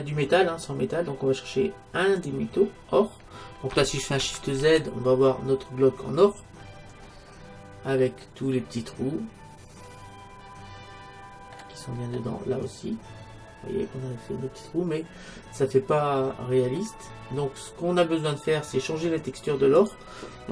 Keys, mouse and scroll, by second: 4.9 shift+z, 6.7-9.9 middle drag, 11.9-14.2 middle drag, 17.2-19.8 middle drag, 19.8-20.5 drag.